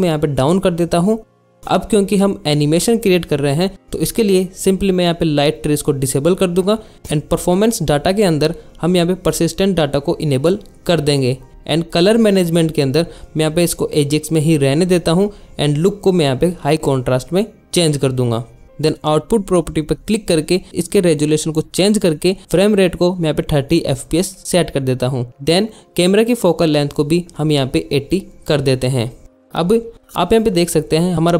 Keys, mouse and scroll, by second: 1.2 drag, 5.4 click, 5.7 drag, 6.0 click, 8.5 click, 10.2 click, 11.3 drag, 17.4-18.5 drag, 20.3 click, 21.0 click, 23.6-25.2 drag, 26.4 click, 27.6 click.